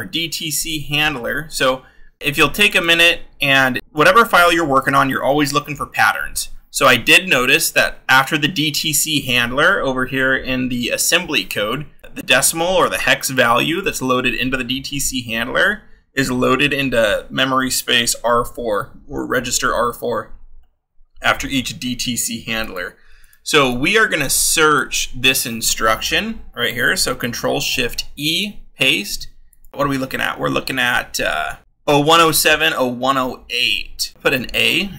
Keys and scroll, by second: 5.9 Down, 8.1 Up, 25.2 ctrl+c, 27.5 ctrl+shift+e, 28.2 ctrl+v, 29.7 scroll.